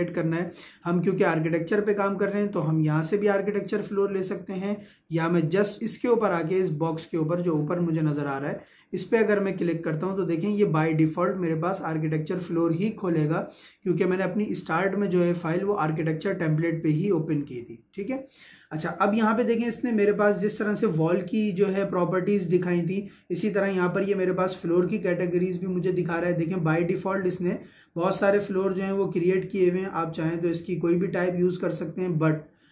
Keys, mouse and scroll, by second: 4.2 Escape, 8.7 click, 26.8 click, 28.1-29.4 scroll down 1.